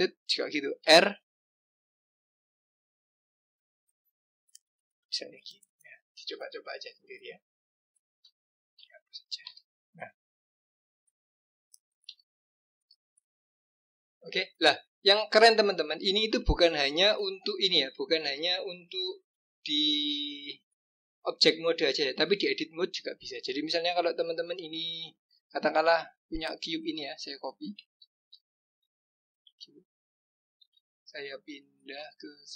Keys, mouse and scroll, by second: 0.8 r, 5.3 click, 6.3 click, 8.6 click, 9.4 Delete, 10.2-11.2 scroll down 2, 11.2 click, 12.0 Delete, 12.7-13.6 scroll up 3, 13.8-14.9 scroll down 2, 16.0 click, 26.5 click, 28.3 ctrl+c, 28.6 ctrl+v, 30.7 g.